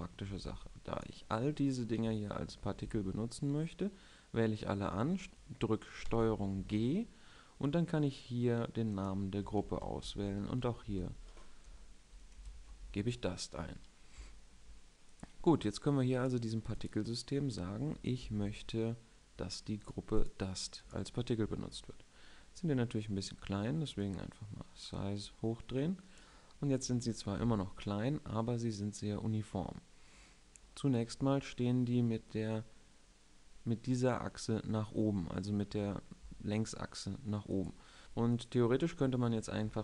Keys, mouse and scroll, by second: 0.0 a, 0.2 b, 2.6 b, 5.2 middle click, 6.0 ctrl+g, 8.8 click, 14.2 middle drag, 21.8-24.1 middle drag, 24.1 click, 30.7-32.4 middle drag, 32.5-32.9 middle drag, 38.0 a, 38.0 b, 38.0 KP_7, 38.9-39.4 middle drag.